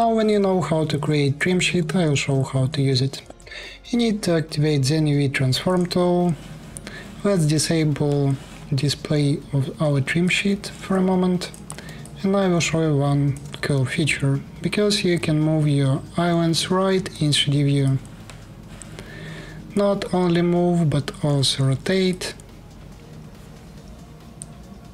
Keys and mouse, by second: 0.0-2.6 alt+drag, 10.1 middle click, 10.5-12.6 alt+drag, 15.0-21.1 drag, 21.0 r, 24.1-24.9 drag.